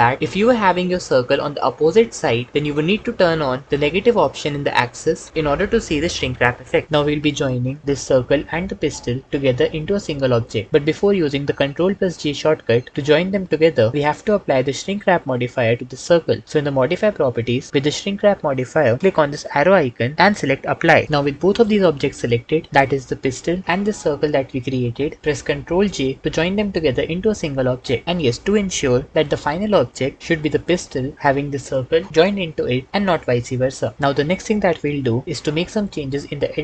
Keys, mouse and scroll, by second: 20.1-20.9 drag, 25.7 ctrl+j.